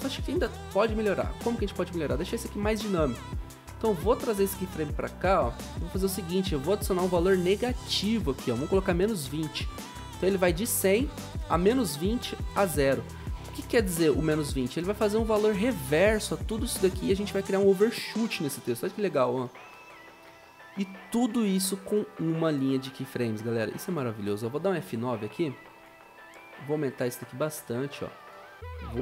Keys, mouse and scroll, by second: 8.6 Return, 8.9-9.7 typing, 18.4 0, 21.9 o, 24.6 F9.